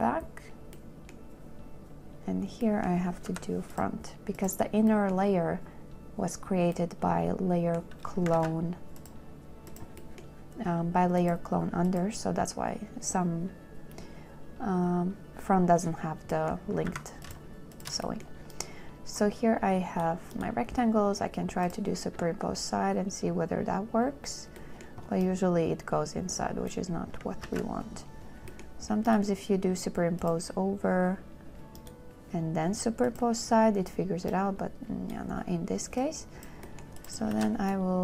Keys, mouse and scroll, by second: 1.0 scroll, 3.8 m, 8.6 ctrl+z, 12.7 z, 17.2 a, 18.0 shift+click, 27.7 ctrl+z, 37.6 shift+f.